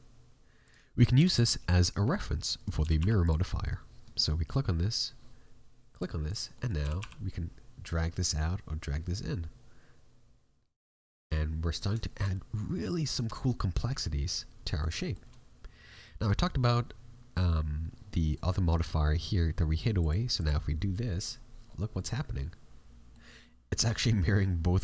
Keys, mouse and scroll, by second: 3.6 right click, 4.8 click, 6.2 right click, 6.5 middle click, 6.7 g, 10.9 scroll up 1, 11.0 middle click, 12.0 shift+middle click, 12.3 middle click, 14.9 shift+middle click, 15.9 middle click, 18.3 right click, 19.9 click, 21.6-22.1 scroll down 5, 21.9 middle click.